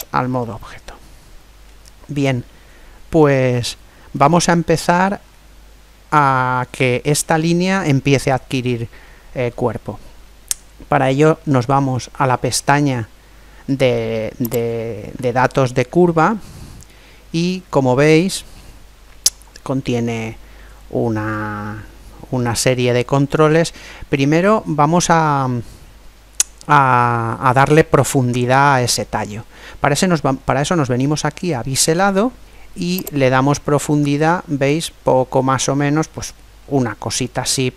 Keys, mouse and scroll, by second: 0.4-2.3 middle drag, 3.8-7.2 middle drag, 14.5 click, 33.0 click.